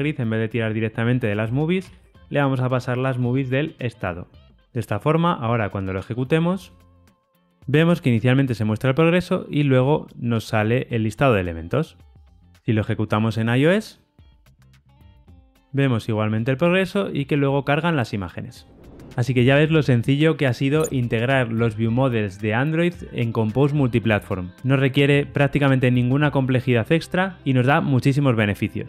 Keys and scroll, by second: 2.6 Return, 4.7 ctrl+r, 4.7 shift+F10, 12.4 ctrl+r, 12.4 shift+F10.